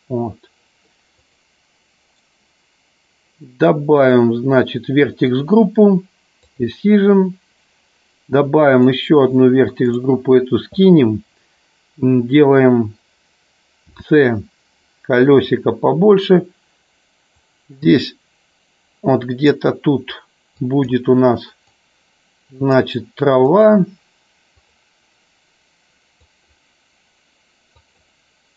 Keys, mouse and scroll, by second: 1.1 click, 2.0 right click, 4.0 click, 6.4 click, 8.7 click, 9.8 click, 20.6 click, 21.6-22.7 drag, 23.5 click, 24.6 click, 26.2 click, 27.7 click.